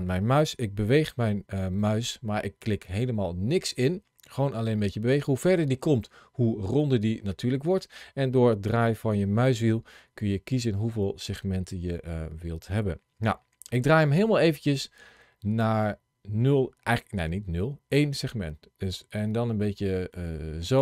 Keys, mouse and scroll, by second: 9.4-12.0 scroll down 2, 12.0-12.3 scroll up 1, 12.3-13.1 scroll down 2, 13.6-14.0 scroll up 1, 14.0-17.1 scroll down 1, 17.1-17.5 scroll up 1, 17.5-18.2 scroll down 1, 20.5 click.